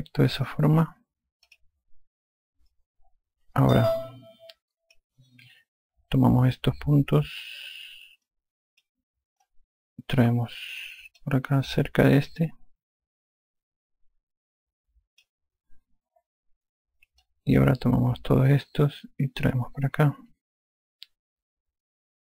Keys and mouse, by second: 1.5 click, 4.9 click, 9.3 click, 10.5 click, 13.2 click, 18.3 click, 20.6 click.